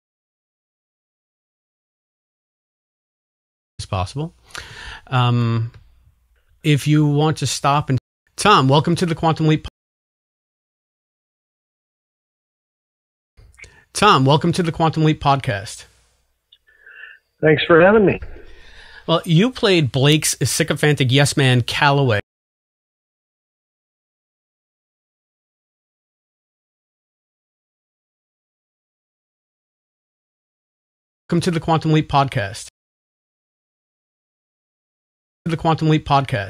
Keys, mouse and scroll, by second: 3.6 click, 3.7 space, 7.9 space, 8.0 click, 8.2 space, 9.6 space, 10.3-11.9 drag, 12.6 ctrl+shift+Delete, 13.3 space, 14.7 click, 15.4 click, 16.9 click, 17.6 click, 18.1-19.1 drag, 19.8 click, 21.1-22.2 drag, 22.1 space, 22.7-25.7 drag, 25.8 Delete, 26.3 click, 27.1 click, 27.6-29.0 drag, 31.1 click, 31.2 space, 32.6 space, 32.7-34.9 drag, 35.3 click, 35.3 space.